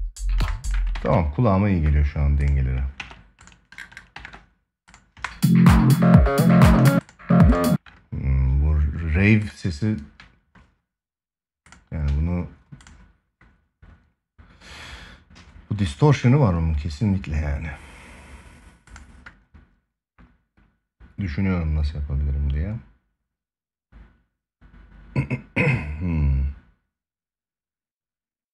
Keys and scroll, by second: 0.6 ctrl+s, 2.7 ctrl+s, 3.9 ctrl+s, 6.5 space.